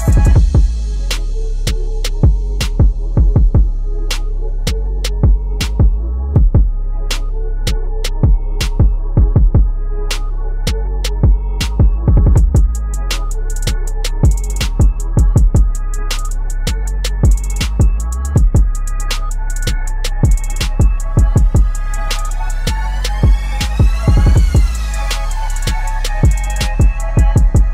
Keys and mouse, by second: 1.1-3.9 drag, 4.4-6.5 typing, 4.7 click, 7.7 click, 10.6 v, 12.9-14.5 drag, 14.5 Right, 16.7 click, 17.1 Up, 19.0 click, 19.5 Caps_Lock, 20.1 click, 20.7 ctrl+t, 21.5-24.5 alt+shift+drag, 26.9 click.